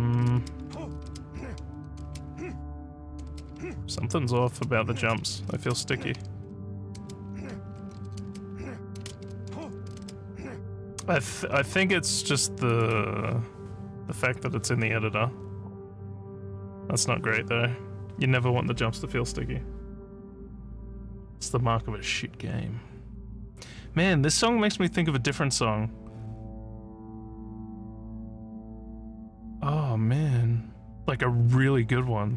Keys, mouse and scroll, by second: 0.0-10.5 typing, 12.7 click.